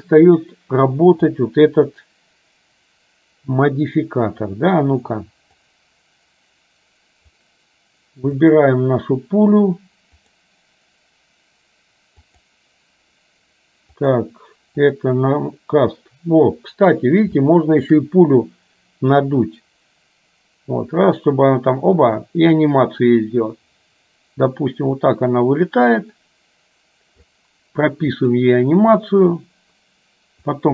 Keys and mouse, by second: 5.8-7.5 drag, 8.5 click, 10.4-12.6 drag, 14.1 click, 17.5 shift+middle click, 19.6-27.5 drag, 28.3 click, 30.6-30.7 drag.